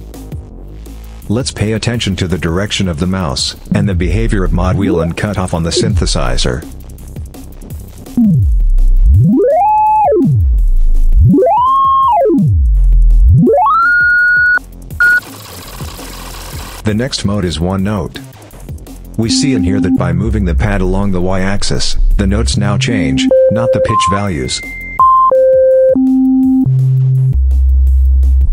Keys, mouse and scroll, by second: 0.1 click, 1.5 click, 2.3 click, 3.5-6.4 drag, 7.3 click, 7.9-14.5 drag, 15.0 click, 16.2 click, 16.4 click, 17.4 click, 19.0-28.5 drag.